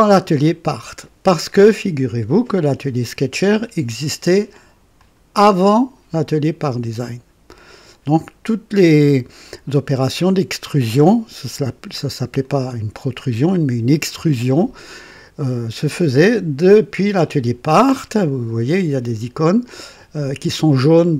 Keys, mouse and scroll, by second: 4.9 click, 9.4 click, 12.3-13.6 drag, 14.8-15.7 drag.